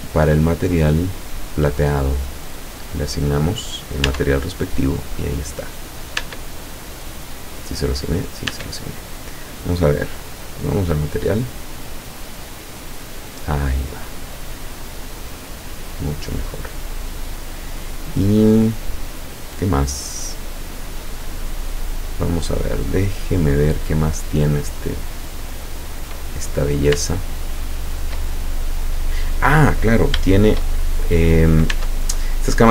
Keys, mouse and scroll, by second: 0.9-1.2 scroll up 2, 1.5 click, 2.7 click, 4.1 Tab, 4.8-5.2 scroll down 2, 5.6-6.0 scroll up 2, 6.2 Tab, 7.7 click, 8.5 Tab, 9.5 click, 10.5 click, 13.9 scroll down 1, 14.6-17.9 middle drag, 20.3 scroll up 1, 20.7-21.1 scroll down 2, 21.5-21.9 scroll down 2, 24.0 middle click, 24.8 middle click, 25.1-26.3 middle drag, 26.5-26.9 scroll up 2, 27.1-28.3 shift+middle drag, 28.3-28.8 shift+scroll up 3, 30.9 shift+scroll down 3, 31.8 Tab.